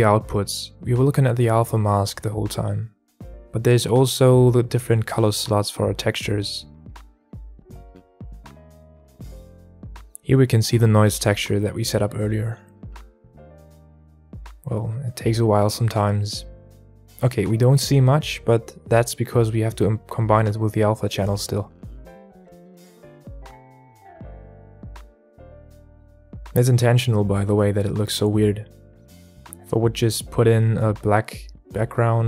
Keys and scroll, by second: 15.4 KP_Enter, 15.4 KP_7, 21.1 KP_Enter, 21.1 KP_7, 21.3 alt+a, 22.9 alt+a, 30.2 shift+a.